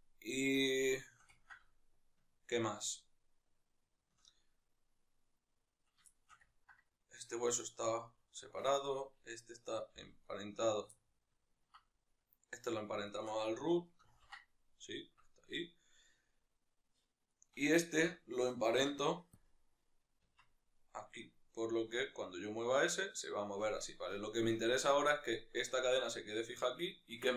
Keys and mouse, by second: 5.4 middle click, 5.4-5.8 right drag, 5.8-8.0 shift+middle drag, 7.2 g, 8.4 right click, 9.7 g, 10.4 right click, 10.7-11.8 ctrl+middle drag, 11.8-19.1 right drag, 19.1 ctrl+p, 20.1 Tab, 20.5 right click, 21.5 g, 23.3 right click.